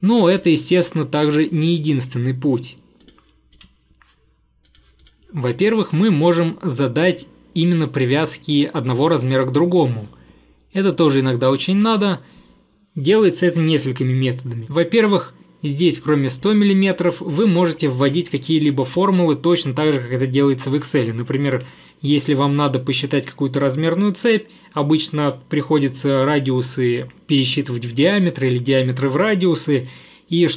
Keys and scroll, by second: 3.6 Delete.